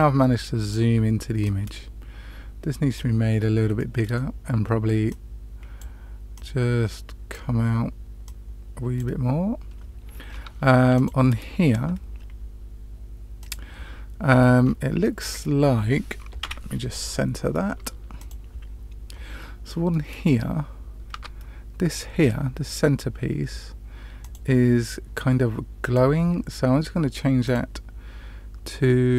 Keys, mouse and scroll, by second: 1.4 click, 3.7-4.1 middle drag, 5.0 click, 6.3-7.3 drag, 8.2 click, 10.2-10.9 scroll up 2, 10.9 click, 13.4 click, 14.2-15.0 scroll up 4, 15.0-15.4 middle drag, 16.3 KP_Decimal, 18.3 click, 21.1 Tab, 24.1 click, 25.8-26.2 drag, 27.4-29.1 drag.